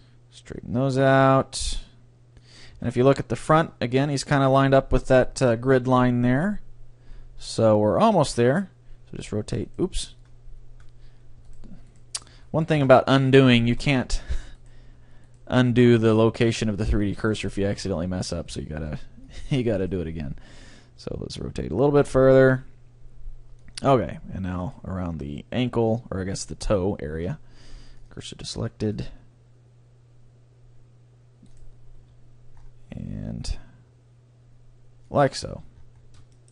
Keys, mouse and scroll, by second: 2.5 click, 2.9-4.3 drag, 2.9-4.9 middle drag, 8.5-10.3 drag, 9.1 r, 9.7-11.5 right drag, 11.6-13.5 right drag, 12.8 shift+s, 13.6-15.5 middle drag, 14.1 c, 14.7-17.1 right drag, 16.3 c, 17.3-19.1 drag, 17.9 ctrl+x, 17.9 ctrl+z, 18.5 c, 21.0 r, 23.8-25.5 drag, 24.6-26.5 right drag, 27.1 shift+s, 28.6 c, 31.8-33.3 drag, 32.0 r, 35.3-36.5 drag, 35.7 Tab, 35.9-36.5 middle drag.